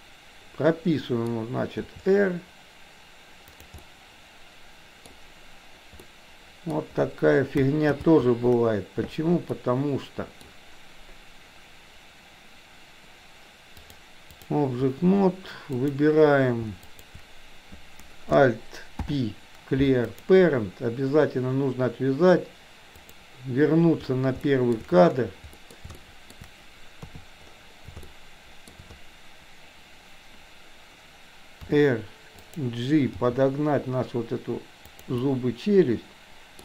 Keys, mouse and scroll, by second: 1.9 r, 3.9-5.2 middle drag, 6.1-6.7 middle drag, 8.0 ctrl+z, 9.6-10.5 middle drag, 13.7 click, 15.7 click, 17.0 shift+click, 19.0 alt+p, 23.1 click, 24.5-24.9 shift+middle drag, 25.6 middle click, 26.0-26.4 shift+middle drag, 27.1 KP_3, 28.1-28.7 shift+middle drag, 31.6 r, 33.2 g, 35.2-36.6 middle drag.